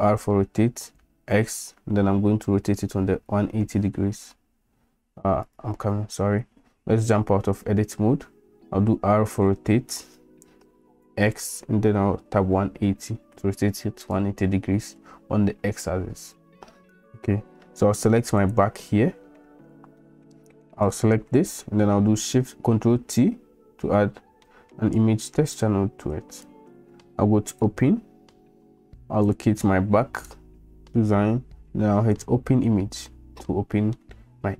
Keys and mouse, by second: 7.0 Tab, 8.8 r, 18.4 click, 20.0 middle click, 20.9 click, 23.3 ctrl+t, 24.6 shift+drag, 24.9-25.5 drag, 26.3 click, 27.5-27.9 drag, 34.0-34.5 middle drag.